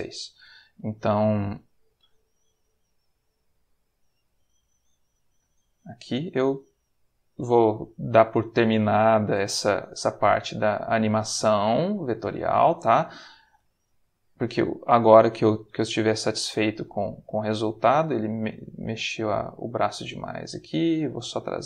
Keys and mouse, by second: 0.3 click, 0.4 r, 1.6 click, 2.3 click, 2.4 r, 3.5 click, 4.1 click, 4.3 r, 5.0 click, 7.1-8.7 drag, 9.1 click, 9.5 r, 10.8 click, 11.4 click, 12.1 r, 12.6 click, 13.3 click, 13.6 r, 14.3 click, 15.2-16.8 drag, 18.3-19.8 drag, 20.4 click, 21.1 r.